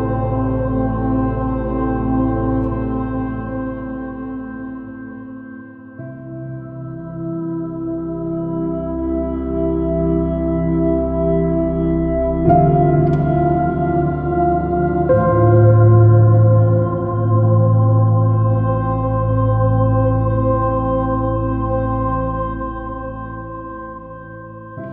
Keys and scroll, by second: 1.4 super+-, 3.7 super+z, 5.6 super+z, 6.4 super+z, 7.8 super+z, 8.5 super+z, 9.8 super+z, 12.2 super+z, 14.5 super+i, 14.7 super+space, 17.6 Return, 20.9 super+d, 21.4 super+z, 21.8 super+z.